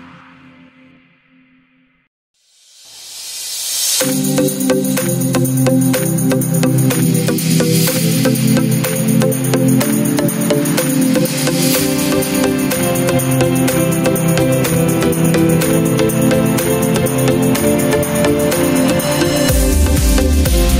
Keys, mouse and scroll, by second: 0.8 click, 1.9 click, 3.2 shift+click, 4.4 shift+click, 6.2 click, 11.0 click, 12.3-13.7 drag, 14.9 click, 16.9-18.4 drag, 19.7 click.